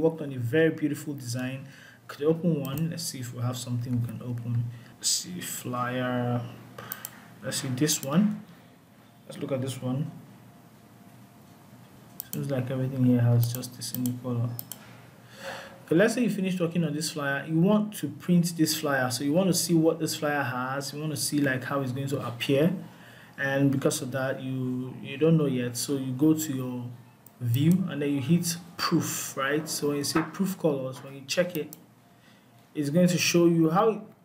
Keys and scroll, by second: 3.4 ctrl+o.